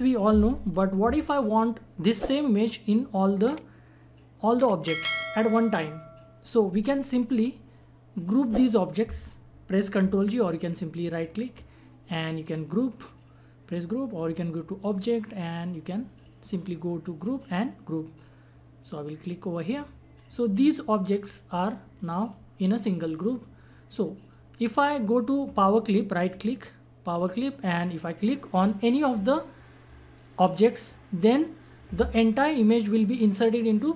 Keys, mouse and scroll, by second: 0.6 click, 7.3-11.0 drag, 11.1 right click, 14.8 click, 19.6-23.3 drag, 24.7 right click, 27.2 click, 30.7 click.